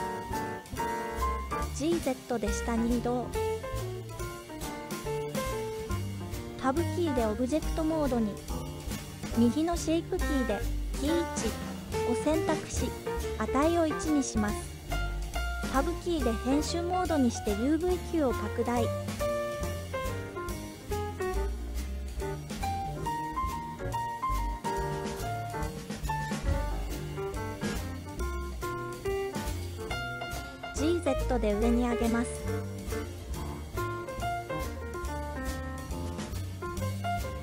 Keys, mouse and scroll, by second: 0.2 click, 1.1 g, 1.5 z, 3.2 click, 7.3 Tab, 9.2-10.5 drag, 10.8-12.0 drag, 14.6 Tab, 18.1 s, 24.2 click, 26.2 s, 26.6 z, 28.5 click, 29.5 z, 31.5 g, 32.0 z.